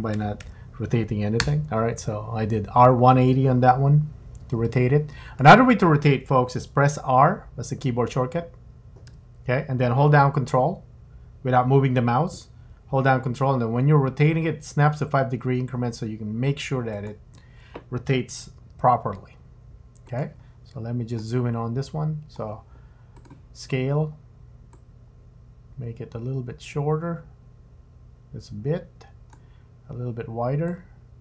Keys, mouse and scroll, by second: 4.4 g, 9.1 r, 18.4 g, 20.4-21.1 scroll up 3, 21.2 shift+middle click, 23.2 click, 24.7 click, 30.7 click.